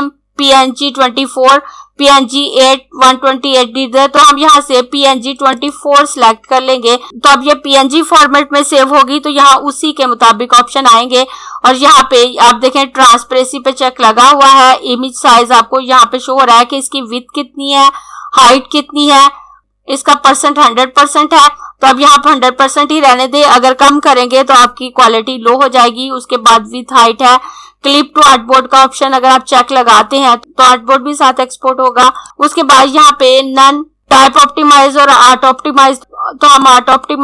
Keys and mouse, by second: 5.4 click, 32.0 click, 36.7 click.